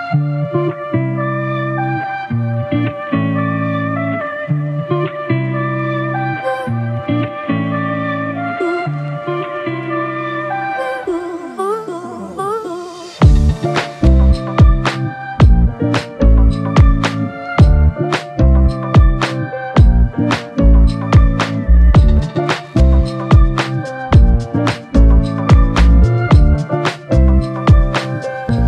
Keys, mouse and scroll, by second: 1.1 double click, 2.3 shift+click, 5.8 alt+click, 10.3 ctrl+z, 13.1 alt+click, 22.0 alt+click.